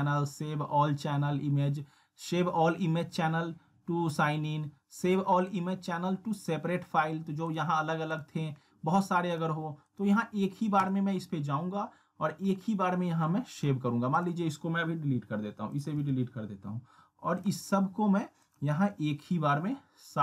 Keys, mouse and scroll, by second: 7.5 click.